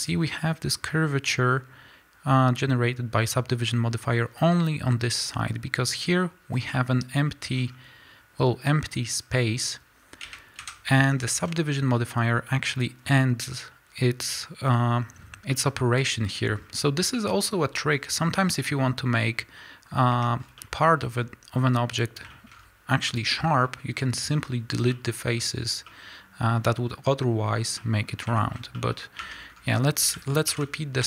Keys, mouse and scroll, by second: 6.5 scroll down 1, 6.7 middle click, 7.5 scroll down 1, 10.2 KP_1, 10.5 KP_3, 11.1-13.6 scroll up 2, 11.2-31.0 middle drag, 13.6-15.1 scroll up 1, 15.1-15.4 scroll down 2, 16.4-17.4 scroll down 2, 17.4-18.3 scroll down 1, 18.6-20.2 scroll up 2, 20.2 Tab, 20.3 scroll down 1, 21.0 scroll up 1, 21.4 scroll down 1, 22.4 scroll up 1, 22.8-23.3 scroll down 1, 29.3 Tab, 29.4-30.0 scroll up 2, 30.0-30.6 scroll down 2, 30.6 alt+h, 30.9 a.